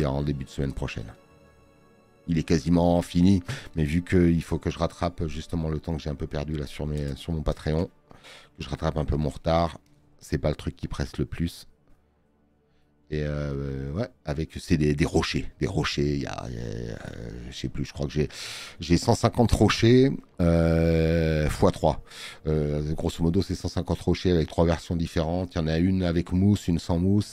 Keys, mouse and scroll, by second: 3.9 space, 4.5 click, 25.1 space, 25.3 click.